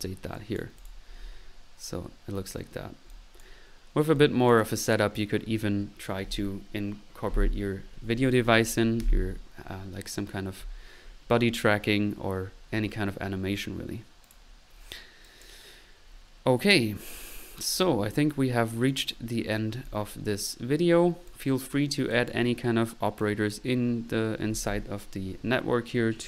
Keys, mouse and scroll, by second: 0.3 click, 3.1 click, 4.2 click, 13.4 middle click, 14.2 click, 15.2-16.0 drag, 17.2 click, 18.9-19.5 drag, 19.9 click, 21.3 click, 21.8 click, 22.3 click, 23.7 drag.